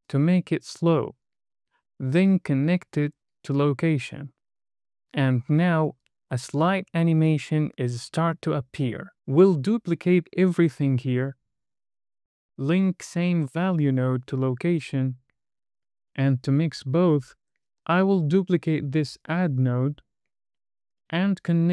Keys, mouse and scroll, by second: 0.0 KP_0, 2.5 drag, 4.7 space, 9.1 click, 10.9 shift+d, 12.1 click, 12.9 click, 16.5 middle click, 18.6 click, 19.5 shift+d, 21.1 click.